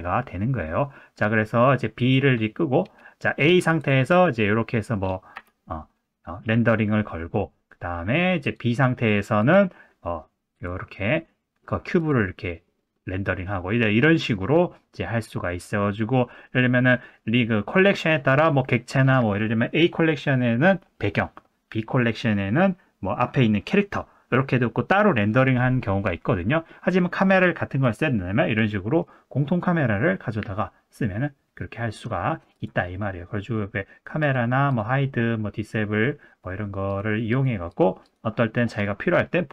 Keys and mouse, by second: 2.0 click, 3.4 click, 3.8 click, 4.2-4.9 middle drag, 5.3 KP_0, 8.4 click, 9.4 click, 10.5 click, 14.3-14.9 middle drag, 27.8 click, 34.2 click, 34.7 click, 36.9 click, 37.3 click, 37.7 click, 38.0 click.